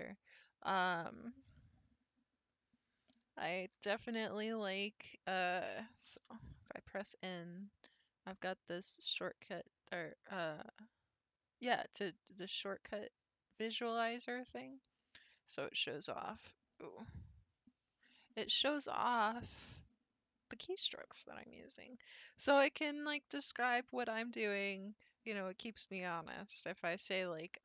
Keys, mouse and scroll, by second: 6.2 n.